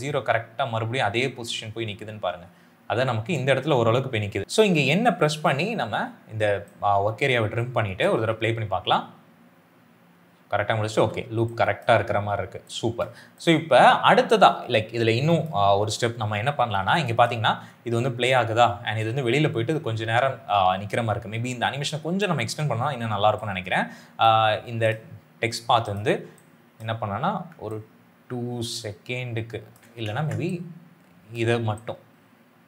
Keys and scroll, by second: 8.1 space, 10.9 space, 17.2 space, 20.6 space, 30.0 ctrl+z.